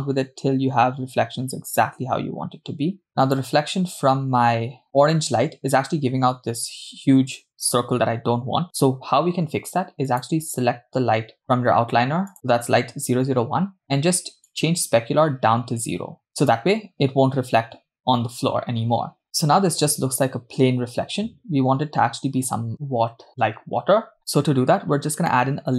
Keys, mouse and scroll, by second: 10.1 click, 11.4 click, 12.3 click, 15.1-17.2 drag, 24.2 click, 24.9 scroll down 3.